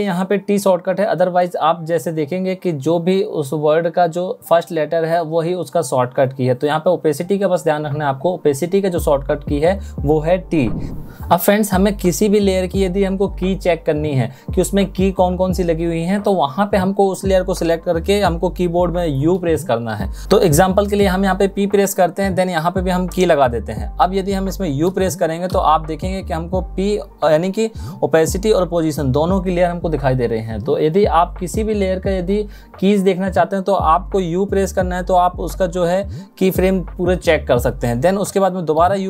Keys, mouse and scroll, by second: 19.0 u, 34.2 u.